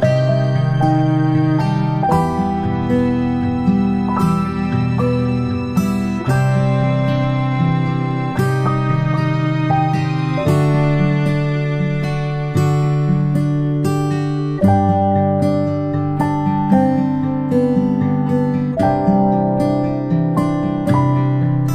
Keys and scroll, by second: 19.9 ctrl+shift+[, 20.1 ctrl+shift+], 20.7 ctrl+[, 20.9-21.7 ctrl+[.